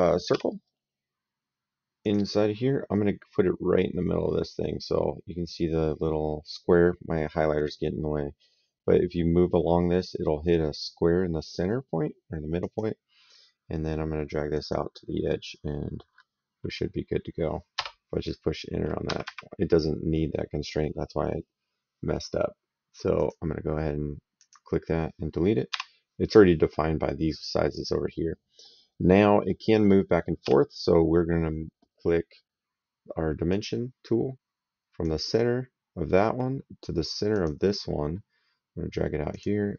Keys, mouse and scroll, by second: 0.1 s, 1.8 click, 12.4 click, 14.3 click, 17.6 Return, 18.9 Escape, 23.0 click, 24.2 click, 25.5 Delete, 30.2 s, 33.3 click, 34.8 click, 37.1 click, 39.1 click.